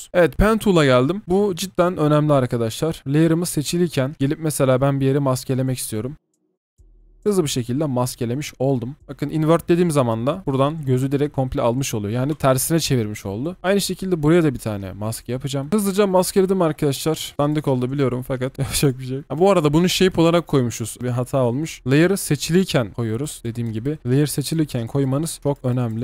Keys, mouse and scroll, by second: 0.1 Delete, 4.1-4.6 scroll up 1, 4.6-5.6 scroll down 1, 5.6-6.1 scroll, 6.1 double click, 8.9 double click, 15.7-17.3 alt+scroll up 2, 17.3 double click, 19.2 double click, 21.2 Delete, 23.4 double click.